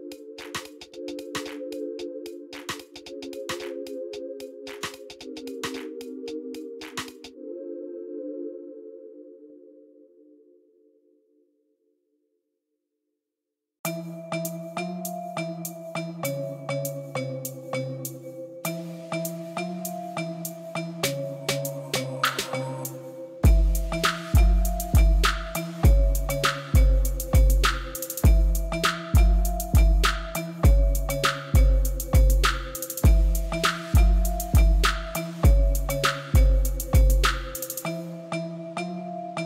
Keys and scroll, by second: 1.0 2, 2.7 ctrl+b, 8.8 2, 9.1 Return, 25.1 Tab, 27.3 Tab, 32.5 Tab, 35.7 i, 37.1 i.